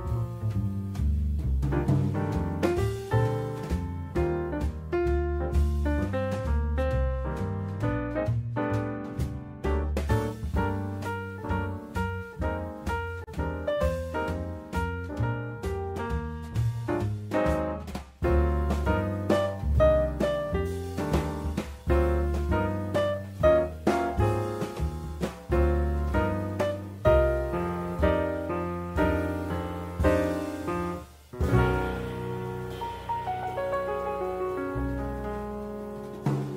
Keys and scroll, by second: 14.4 Escape.